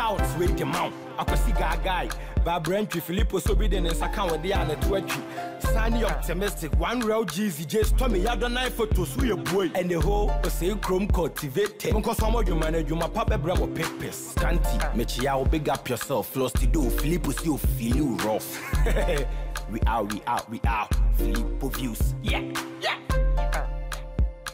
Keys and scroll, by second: 0.0 ctrl+t, 15.9 Down, 17.5 Return.